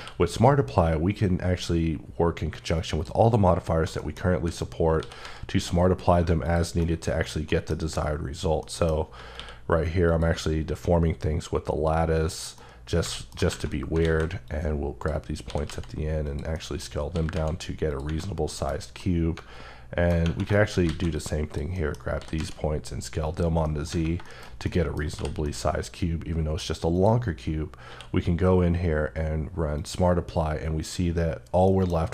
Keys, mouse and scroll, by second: 2.8 click, 3.3 scroll down 1, 3.7 middle click, 4.2 a, 4.8 s, 5.0 z, 6.3 click, 6.6 shift+middle click, 8.1-8.4 scroll down 1, 8.4 middle click, 8.8 Tab, 9.1 q, 9.9 click, 11.9 click, 12.3 scroll down 1, 12.3 middle click, 13.8 alt+a, 14.3 click, 15.3 s, 15.5 z, 16.0 click, 16.3 middle click, 16.7 scroll up 2, 16.9 s, 17.1 z, 17.7 click, 17.8 Tab, 18.0 scroll down 2, 18.3 middle click, 18.8 middle click, 20.3 shift+middle click, 20.5 shift+scroll down 2, 20.6 alt+a, 21.0 click, 21.5 middle click, 22.0 s, 22.1 z, 23.0 click, 23.4 middle click, 24.0 shift+middle click, 24.9 h, 25.3 middle click, 26.7 click, 27.5 scroll up 1, 27.7 q, 29.5 click, 31.5 middle click, 31.8-32.1 scroll up 2.